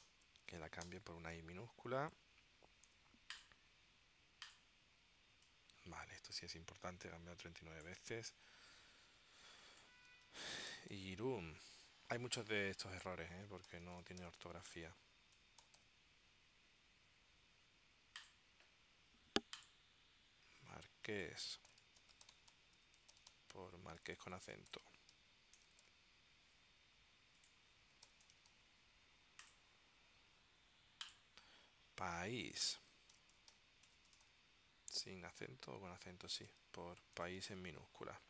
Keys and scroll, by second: 0.1 shift+y, 0.6 Tab, 1.0 y, 3.0 Tab, 10.3-11.6 typing, 12.0 Tab, 13.9-16.4 typing, 21.6-26.0 typing, 25.9 Tab, 27.8-29.1 typing, 33.3 shift+p, 34.0 BackSpace, 35.0 s, 36.6 Tab, 37.0-38.1 typing.